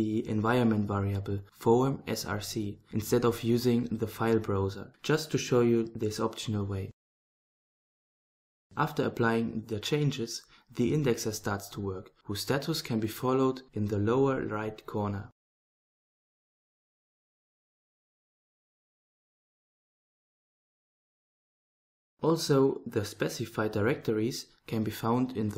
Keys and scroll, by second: 0.6-2.7 typing, 4.0-7.3 typing.